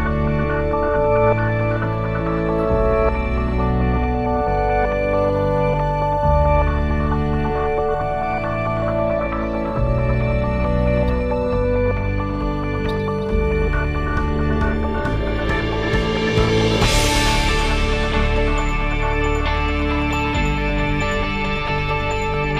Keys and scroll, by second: 15.6 ctrl+s.